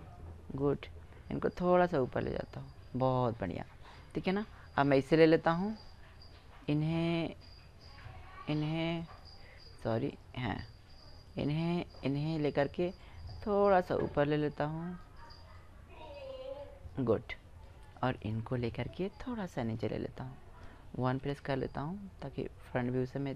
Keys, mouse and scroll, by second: 0.4 right click, 2.3 click, 3.2 right click, 4.9 middle click, 5.9 click, 6.4 middle click, 7.2-9.9 right drag, 9.9 middle click, 11.4 middle click, 11.6-12.7 drag, 12.7 middle click, 13.5 click, 14.2 middle click, 15.3-16.8 drag, 16.8 middle click, 19.2-21.0 right drag, 21.0 KP_1, 21.9-23.3 drag, 21.9-23.3 right drag.